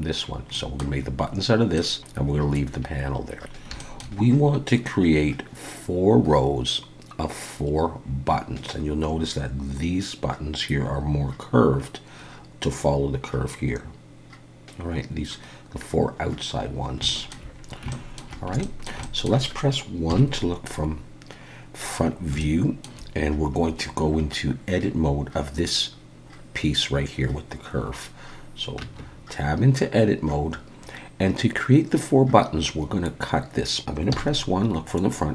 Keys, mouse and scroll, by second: 0.5 middle click, 1.8 middle click, 3.3 scroll down 1, 3.4 scroll up 3, 3.8 shift+middle click, 4.2-4.7 scroll up 2, 16.2-17.0 scroll down 2, 17.1 shift+middle click, 17.5-17.9 scroll down 2, 17.9 shift+middle click, 18.6 shift+middle click, 19.0 middle click, 20.1 KP_1, 21.5-22.0 scroll up 4, 22.0-22.4 scroll down 3, 22.4 shift+middle click, 28.8 Tab, 33.6 middle click, 33.6 scroll down 1, 34.1 KP_1, 35.2-35.3 scroll up 1.